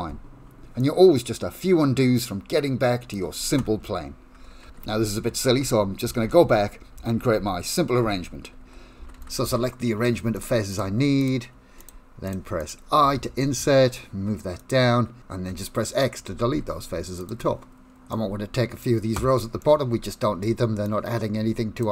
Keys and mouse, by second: 0.9-3.2 drag, 3.8 Tab, 4.8 ctrl+z, 5.0 ctrl+z, 5.1 ctrl+z, 5.4 ctrl+z, 5.7 ctrl+z, 6.2 ctrl+z, 6.3 ctrl+z, 6.5 ctrl+z, 7.0 ctrl+z, 7.2 ctrl+z, 7.4 ctrl+z, 8.0 ctrl+z, 8.7 ctrl+z, 9.0 ctrl+z, 9.2 ctrl+z, 9.5 ctrl+z, 10.4 shift+click, 10.7 shift+click, 11.2 shift+click, 11.8 shift+click, 12.3 shift+click, 12.6 shift+click, 13.4 i, 16.6 x, 18.2 middle click, 19.6 middle click, 20.8-21.8 drag.